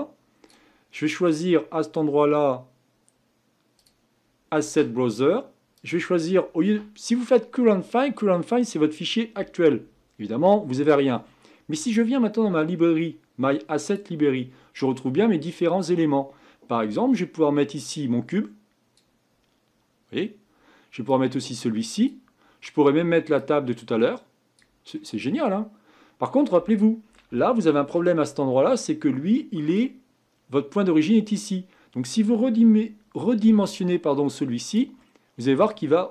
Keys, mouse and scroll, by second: 0.0-8.8 drag, 17.8-18.9 drag, 21.1-22.1 drag, 23.3-24.5 drag, 24.9-28.1 middle drag, 28.1 scroll up 5, 28.8-29.3 scroll down 1, 29.3-31.6 middle drag, 31.6-33.4 scroll down 2, 33.4 s, 35.0-36.1 middle drag.